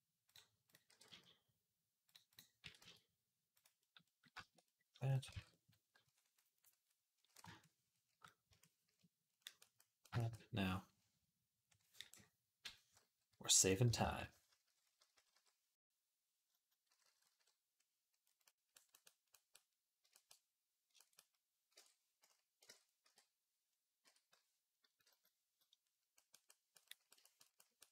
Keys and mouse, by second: 0.4 click, 0.7 r, 2.4 r, 4.8 click, 4.9-7.4 ctrl+middle drag, 5.2 ctrl+Tab, 7.4-27.9 shift+drag, 8.0 middle click, 8.0 right click, 8.8 middle click, 8.8 right click, 13.6-15.1 typing, 16.7 [, 16.8 [, 17.0 [, 17.2 [, 21.5 ctrl+Tab, 22.6 ctrl+Tab, 22.8-24.8 typing, 26.5 |, 27.8 d.